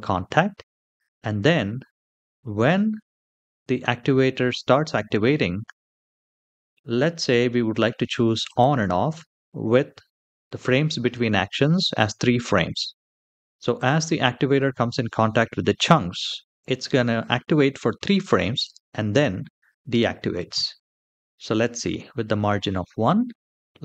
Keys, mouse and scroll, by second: 8.2 click.